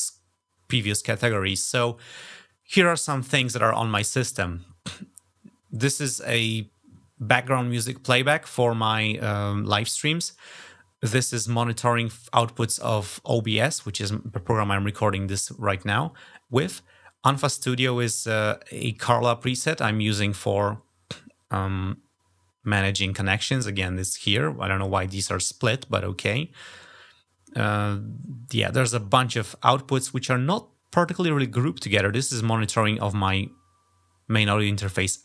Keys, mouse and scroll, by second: 2.0 scroll up 2, 28.9 scroll down 2, 29.6-30.1 scroll down 3, 31.3 scroll down 2.